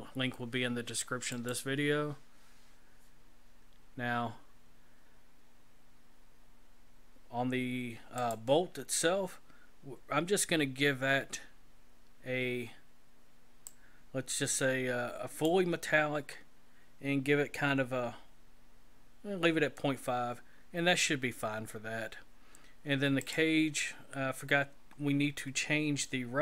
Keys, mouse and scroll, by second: 1.6 click, 8.2 click, 9.1-9.9 scroll down 4, 9.9-11.2 scroll down 2, 13.7 click, 16.1-16.7 scroll down 3, 20.6-21.5 scroll up 5, 21.5-23.2 scroll up 7, 23.2 click, 23.9-25.3 scroll down 12.